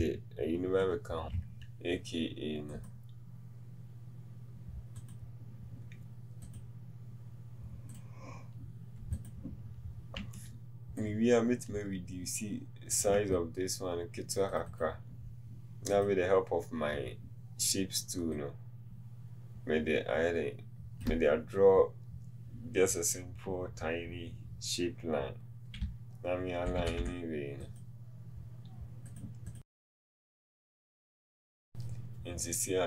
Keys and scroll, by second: 26.0 Down.